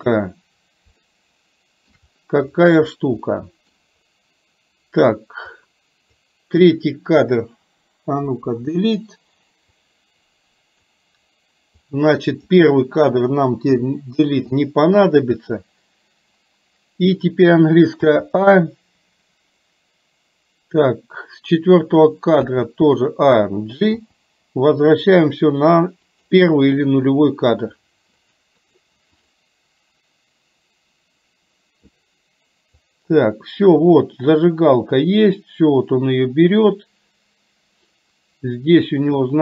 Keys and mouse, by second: 1.1 shift+middle click, 3.5 middle click, 5.6 click, 8.3 Delete, 9.8-11.0 drag, 12.0 click, 13.8 Delete, 18.1 a, 22.5 a, 24.1 g, 28.7 click, 33.0-39.4 drag.